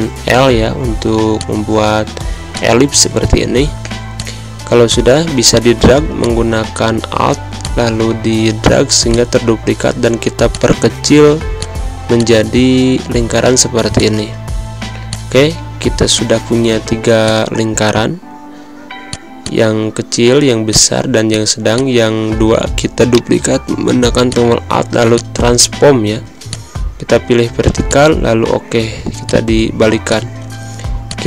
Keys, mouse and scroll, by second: 0.5 v, 1.3-3.1 drag, 23.7 typing, 29.0-31.0 drag, 31.2 space.